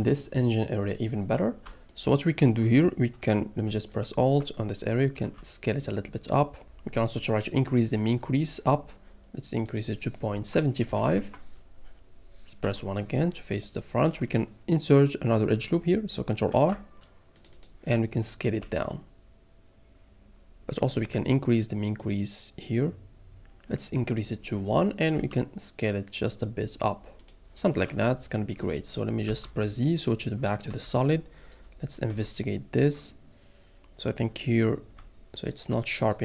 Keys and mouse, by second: 3.9 alt+click, 5.2 s, 8.7 middle click, 9.6-11.2 drag, 12.6 KP_1, 16.5 ctrl+r, 17.3 click, 17.5 click, 18.6 s, 20.7 click, 22.1-23.5 drag, 25.1 s, 29.3 z, 30.7 Tab, 30.9-31.3 middle drag, 32.1 Tab, 35.3 alt+click.